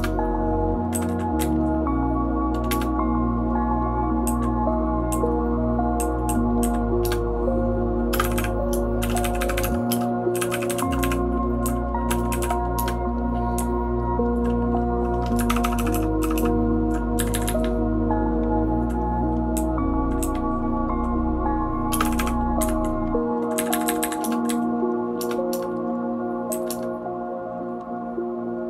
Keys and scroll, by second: 0.9 Down, 1.4 Down, 2.7 Return, 4.2 Down, 5.1 Down, 6.0 Down, 6.3 Down, 6.6 Down, 7.2 Return, 8.1 typing, 12.5-16.3 typing, 17.2 Up, 17.3 Up, 17.4 Up, 17.6-18.8 Up, 19.6 Down, 20.2 Down, 20.3 Down, 20.8 Down, 21.9 space, 22.0 e, 22.2 e, 22.6 Up, 23.5 Up, 23.7 Up, 23.8 Up, 24.0 Up, 24.2 Return, 24.4 Down, 25.2 Return, 25.5 Return, 26.5 Down, 26.7 Return.